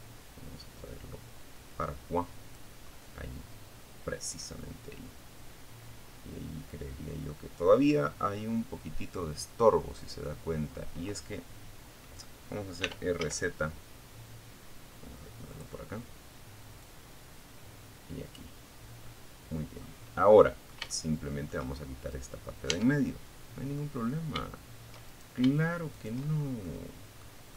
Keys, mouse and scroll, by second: 1.1-5.6 middle drag, 6.2-6.7 scroll up 1, 8.4 scroll down 2, 11.0 r, 11.3 z, 13.7 click, 15.0-16.7 drag, 17.2-19.0 middle drag, 19.1 shift+middle click, 20.0 shift+scroll up 1, 20.3 right click, 20.9 Tab, 21.4 middle click, 22.3 scroll up 1, 23.3 shift+right click, 24.1 shift+right click, 24.5 shift+scroll down 2, 24.8 shift+middle click, 25.7-27.1 middle drag.